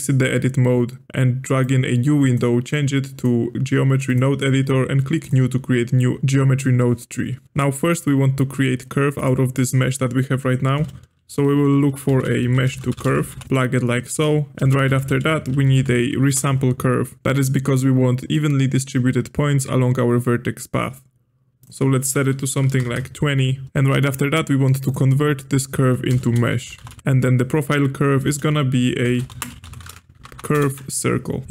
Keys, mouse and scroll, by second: 1.6-6.2 drag, 9.1 click, 10.8 space, 14.1 click, 14.6 space, 21.6-23.7 drag, 24.8 click, 26.1 space, 28.2 space, 30.3 Down, 31.4 ctrl+z.